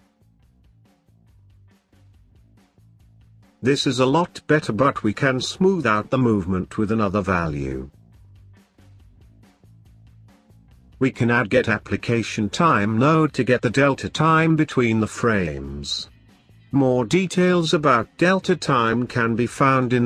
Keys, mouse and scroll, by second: 0.7-2.1 drag, 10.4 shift+a, 16.9 ctrl+right click, 17.9 shift+a.